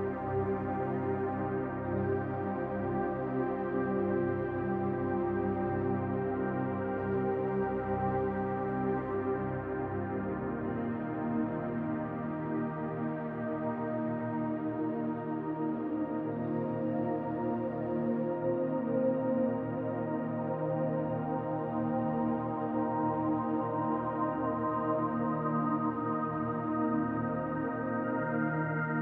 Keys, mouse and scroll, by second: 1.6 middle click, 2.9 click, 3.7 middle click, 4.6 click, 5.7 middle click, 6.2 click, 7.0 middle click, 7.7 middle click, 8.6 click, 9.6 click, 10.7 click, 11.7-12.4 scroll down 3, 12.0 middle click, 13.4 shift+middle click, 14.1 click, 15.5 middle click, 16.7 shift+middle click, 17.2-17.6 scroll down 2, 17.6 shift+middle click, 18.2-18.5 scroll down 1, 18.5 middle click, 19.7 shift+middle click, 20.3-20.6 scroll up 4, 20.7 shift+middle click, 21.9 shift+right click, 24.4 click, 25.7-26.0 scroll up 1, 26.1 shift+middle click, 27.7 shift+a.